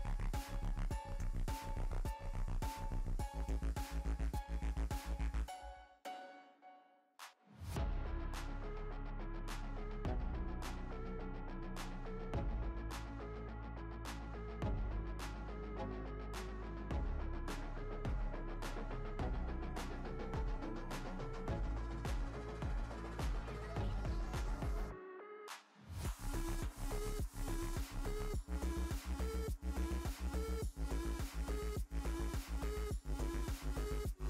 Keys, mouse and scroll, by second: 0.2-2.5 drag, 3.6-5.9 drag, 5.9-6.3 scroll down 4, 6.3-7.2 shift+middle drag, 7.2-8.0 scroll down 2, 9.0-16.0 middle drag, 15.5-16.0 scroll up 5, 16.0-19.9 drag, 24.0 click, 27.5 click, 29.2 click, 31.2-32.0 drag, 32.0 click, 32.4-33.0 scroll down 3, 33.0-34.2 middle drag.